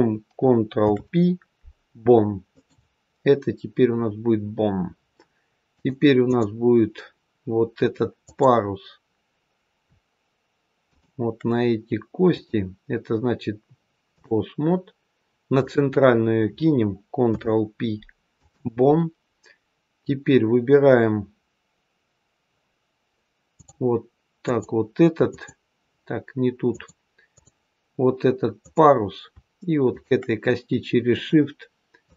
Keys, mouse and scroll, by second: 0.7 ctrl+p, 5.7 click, 8.1 click, 10.7 shift+click, 12.3 click, 15.5 click, 17.2 ctrl+p, 23.4 click, 24.3 click, 25.1 click, 26.6 click, 28.5 click, 29.8 shift+click, 31.0 click.